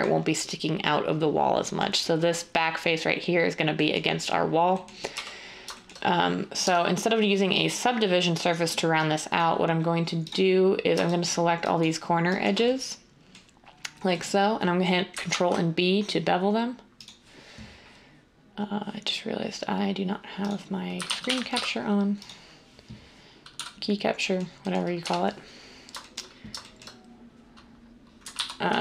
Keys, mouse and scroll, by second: 23.6 d, 25.0 1, 28.3 ctrl+z.